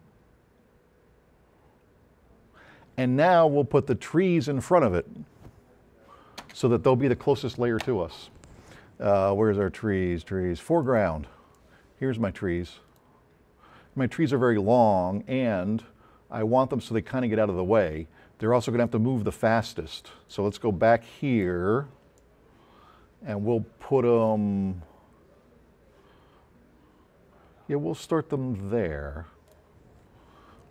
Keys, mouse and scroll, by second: 6.4 space, 10.9 click, 11.6-13.1 drag, 14.3-19.0 drag.